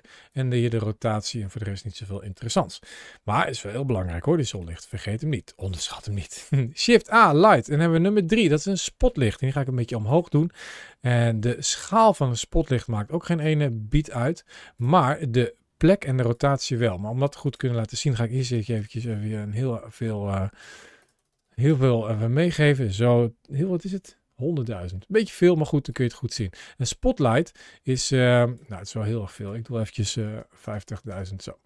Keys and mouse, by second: 0.1 click, 4.2 x, 6.5 shift+a, 9.4 g, 9.9 click, 10.7 s, 11.5 click, 12.6 s, 14.6 click, 15.6 g, 16.1 click, 17.2-18.8 drag, 18.4 KP_0, 18.5 KP_0, 19.7-21.5 drag, 20.8 KP_0, 21.1 KP_0, 21.2 KP_0, 24.9 middle click, 25.7 click, 29.2-30.9 drag, 30.4 KP_0, 30.7 KP_0.